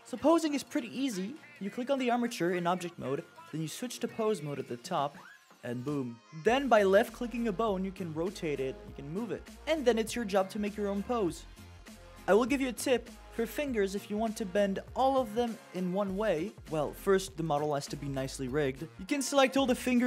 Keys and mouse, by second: 1.5 click, 3.8-4.6 drag, 6.1-7.8 drag, 9.6-11.7 drag, 12.3 middle drag, 13.0 click, 13.9 c, 19.1 click, 19.5 c.